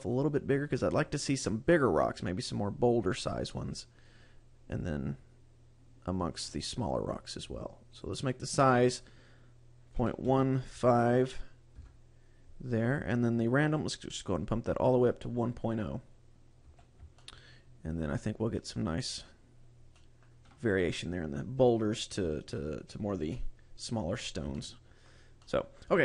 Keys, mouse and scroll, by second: 2.7 click, 8.3 click, 13.9 click, 16.9 a, 17.4 shift+middle click, 20.1 shift+middle click, 24.7 shift+middle click, 25.6 shift+middle click.